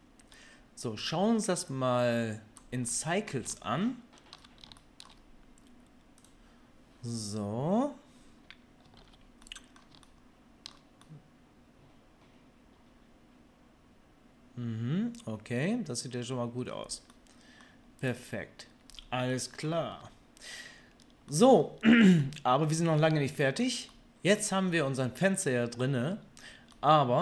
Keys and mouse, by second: 1.9-6.4 drag, 6.4-18.0 middle drag, 9.0 alt+a, 18.0 click, 18.1-19.3 middle drag, 20.0 Tab, 26.7-27.2 middle drag.